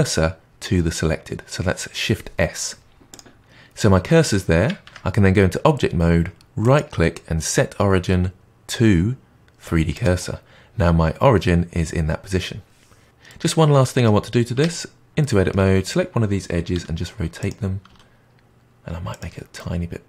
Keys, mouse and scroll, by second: 4.8 Tab, 6.6-9.6 right drag, 13.2-14.4 middle drag, 14.4 Tab, 15.1 middle click, 15.8 click, 16.7 r, 17.8 s, 19.5-20.0 middle drag.